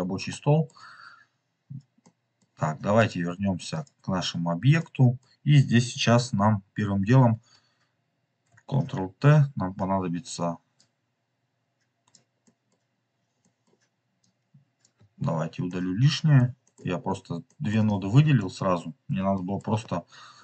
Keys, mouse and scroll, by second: 0.2 middle click, 1.0 scroll up 2, 1.9-2.9 middle drag, 2.3-2.9 scroll up 1, 3.0-3.8 drag, 4.3-4.7 scroll down 4, 4.9 middle click, 9.2 ctrl+t, 10.7-12.1 drag, 12.3 middle click, 13.3 middle click, 14.1-14.8 drag, 15.6 middle click, 16.5 middle click, 16.7-17.1 scroll down 3, 17.3 middle click, 17.8-18.9 drag, 19.1 Delete, 19.2 middle click, 20.0-20.4 scroll up 4.